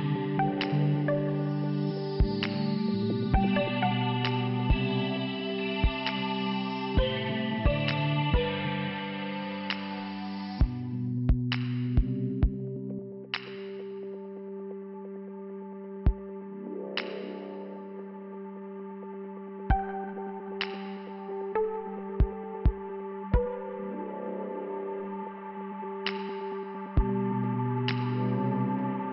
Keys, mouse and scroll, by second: 0.6 click, 2.7 click, 9.7 click, 9.7 click, 11.0 click, 12.3 middle click, 13.1 scroll up 2, 14.2 click, 14.3 click, 16.3 click, 16.5 click, 17.6 click, 19.2 scroll down 2, 19.9 click, 20.1 click, 20.2 double click, 21.7 click, 21.8 click, 22.8 click, 22.9 click, 23.6 click, 23.7 click, 28.2 click.